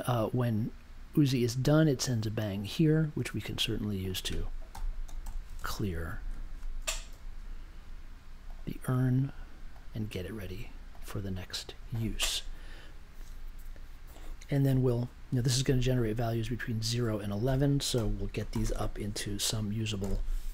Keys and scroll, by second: 4.4-5.7 typing, 7.1 super+j, 17.9 n, 18.5 shift+=, 18.7 space, 19.9 6.